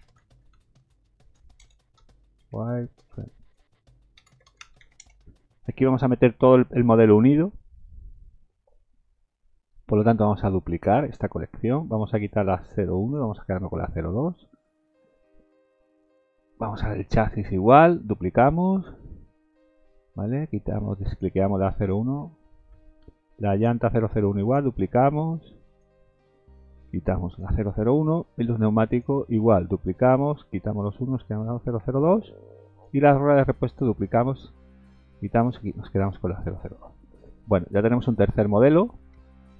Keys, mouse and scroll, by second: 1.6 BackSpace, 8.5-9.1 scroll up 6, 10.0 right click, 13.0 click, 13.8 scroll down 1, 16.0 click, 17.5 click, 18.0 right click, 21.7 click, 22.8-23.1 scroll down 3, 23.6 click, 23.8 right click, 25.7 click, 27.3 click, 27.8-28.9 scroll down 3, 28.9 click, 29.3 right click, 30.8 click, 31.4-31.8 scroll down 3, 32.7 click, 33.0 right click, 35.6 click, 37.3-37.7 scroll up 2, 37.7 scroll down 4, 38.2 middle click, 39.2 shift+middle click.